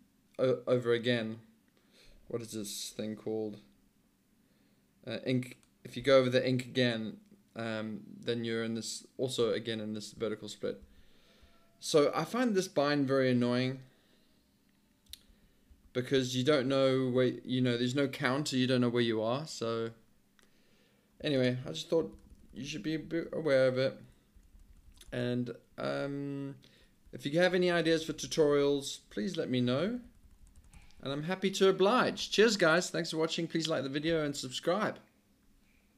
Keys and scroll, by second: 10.8 alt+d, 15.3 alt+i, 15.7 alt+d, 16.2 alt+d, 16.7 alt+i, 21.4 alt+Return, 22.1 alt+l, 22.3 alt+l, 22.5 alt+l, 22.7 alt+l, 22.9 alt+h, 23.1 alt+h, 23.3 alt+h, 23.9 alt+h, 24.4 alt+l, 24.5 alt+l, 24.9 alt+l, 25.1 alt+Return, 25.7 alt+h, 26.5 alt+h, 27.1 alt+l, 27.7 alt+h, 27.9 alt+l, 28.3 alt+l, 28.4 alt+l, 28.6 alt+l, 29.1 alt+Return, 29.7 alt+l, 29.9 alt+l, 30.1 alt+l, 30.3 alt+l, 30.4 alt+l, 30.6 alt+l, 30.8 alt+l.